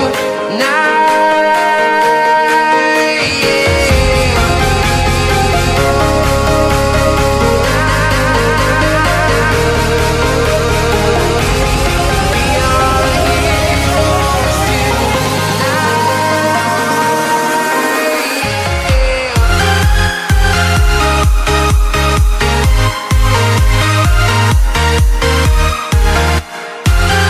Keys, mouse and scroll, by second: 0.9 click, 4.2 click, 9.8 click, 18.1 click, 21.1 click.